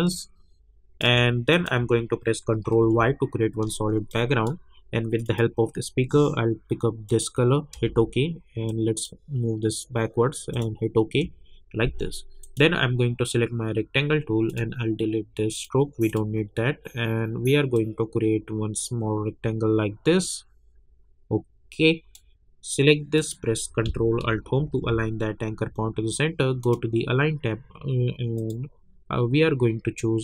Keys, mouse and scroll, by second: 2.7 ctrl+y, 4.1 click, 7.7 Return, 8.7-23.2 drag, 24.6 ctrl+alt+Home, 26.6 click.